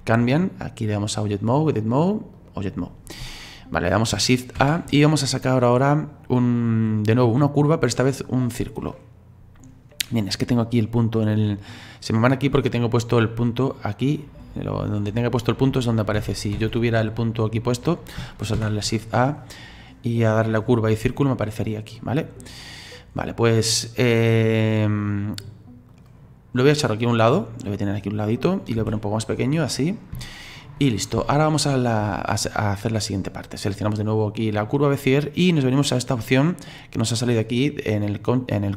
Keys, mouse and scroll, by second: 1.0-4.1 drag, 4.6 shift+a, 9.9-12.8 scroll down 4, 12.8 click, 13.2 click, 14.2 click, 14.5 click, 15.0 click, 15.3 click, 16.1 ctrl+z, 16.5 ctrl+z, 17.5 click, 18.5 shift+a, 21.7-22.3 scroll up 8, 22.3-23.4 scroll down 7, 23.4-24.4 scroll down 2, 24.4-25.9 scroll up 4, 25.9 click, 26.8-28.8 drag, 28.8 s, 29.9 scroll up 1, 30.3 shift+middle click, 30.8-31.3 scroll down 4, 31.3-33.7 shift+middle drag, 33.7 right click.